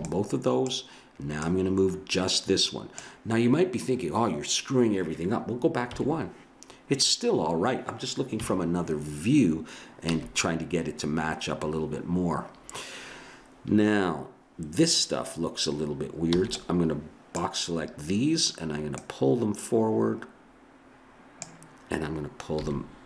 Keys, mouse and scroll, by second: 1.4-3.0 right drag, 5.9 KP_1, 8.3 KP_3, 10.1 a, 16.4 b, 18.9-20.9 drag, 22.6 g.